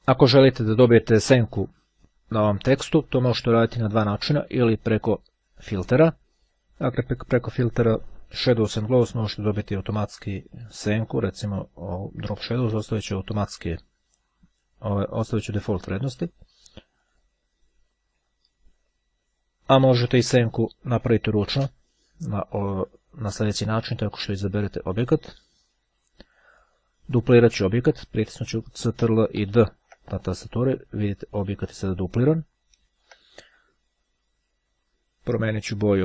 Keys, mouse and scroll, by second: 4.5 click, 6.4 click, 10.5-12.3 drag, 15.7 click, 17.2 click, 18.9 ctrl+z, 23.6-25.4 drag, 28.9 ctrl+d, 31.2-32.7 drag, 32.8 ctrl+z.